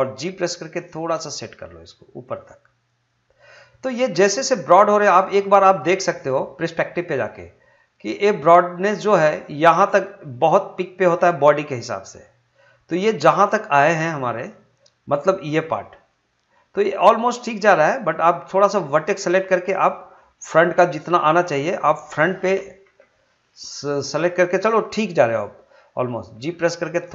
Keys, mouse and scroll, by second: 0.3 g, 2.8 click, 5.4-11.3 middle drag, 12.5-16.9 middle drag, 17.7-19.2 drag, 19.2 middle click, 26.3 g.